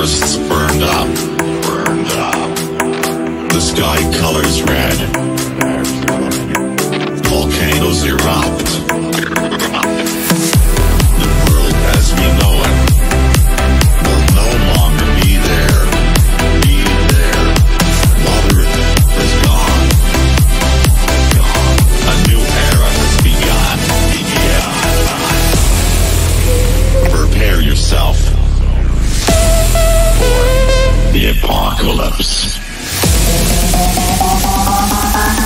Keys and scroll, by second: 9.3 F3, 12.9 c, 13.2 Escape, 26.7 c, 27.1 F3, 27.2 Escape, 33.3 shift+F2, 33.9 F3.